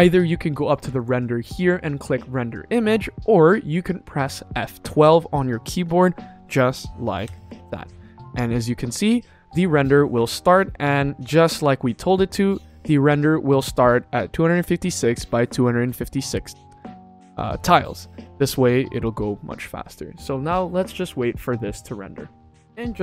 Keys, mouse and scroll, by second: 0.9-2.4 drag, 7.7 F12.